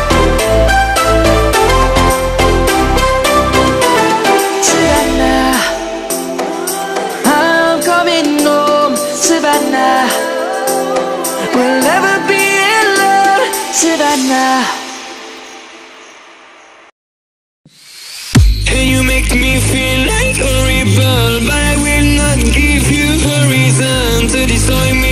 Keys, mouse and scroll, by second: 3.7 Up, 4.7 click, 5.0 space, 5.1 click, 5.3 space, 6.7-11.8 drag.